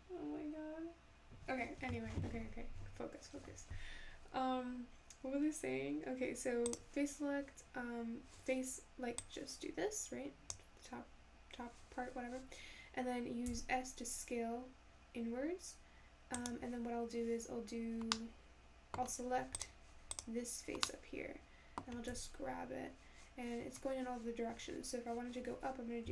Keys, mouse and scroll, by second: 6.7 click, 9.2 click, 13.5 s, 18.1 scroll down 1, 18.2-19.6 middle drag, 19.6 click, 20.2 click, 20.8 scroll down 1, 20.9-22.1 middle drag, 22.1 g.